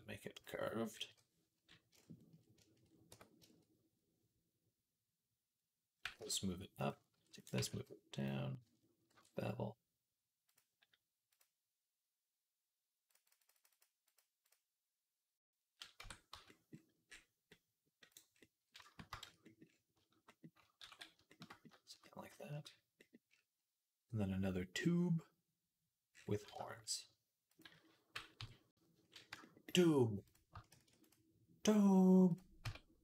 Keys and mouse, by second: 0.2 click, 0.2 middle click, 0.9 KP_3, 2.9 Tab, 5.9 g, 7.0 ctrl+r, 7.3-11.1 middle drag, 7.4 g, 9.0 ctrl+b, 11.1-18.0 drag, 15.8 Tab, 16.2 z, 18.0 middle click, 19.1 shift+c, 20.7 ctrl+s, 21.0-27.3 shift+middle drag, 27.3 click, 27.4-30.1 middle drag, 28.2 KP_3, 30.1 click, 30.4-32.2 shift+middle drag, 30.6 shift+d, 32.2 click, 32.5 Tab, 32.5-33.0 middle drag.